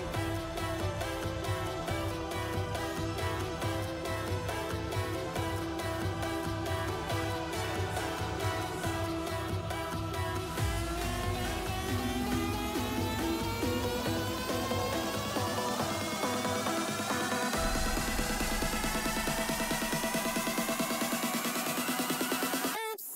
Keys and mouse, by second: 0.0 shift+middle click, 0.5 middle click, 0.7 3, 2.4 click, 4.1 shift+click, 5.5 KP_7, 6.2 shift+middle click, 7.0 Tab, 7.3 Tab, 7.6 2, 8.1 shift+s, 8.6 Tab, 9.2-9.6 middle drag, 9.9 shift+a, 11.0 Tab, 11.3 click, 11.7 KP_7, 12.4 s, 14.0 s, 17.3 Tab, 17.5 middle click, 18.2 Tab, 18.3 middle click, 18.9 e, 20.2 a, 20.7 shift+n, 21.0 Tab, 21.6 shift+middle click, 22.3 middle click, 22.5 Tab, 22.8 middle click.